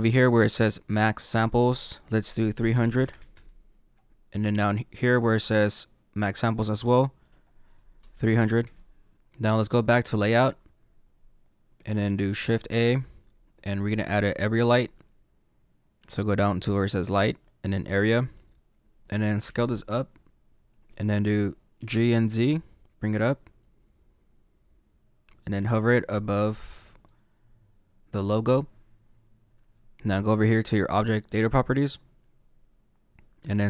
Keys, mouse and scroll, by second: 3.3 KP_0, 9.1 click, 10.3 click, 19.4 s, 21.7 g, 25.4 z, 25.4 z, 25.9 middle click.